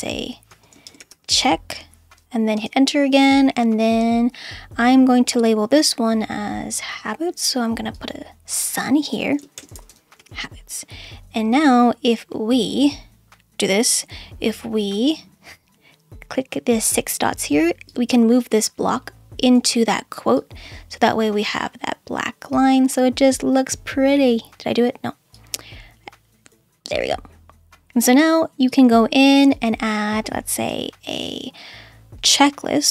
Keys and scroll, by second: 0.5-1.9 typing, 2.5 Return, 4.1 Return, 9.2-10.7 typing, 30.7 /.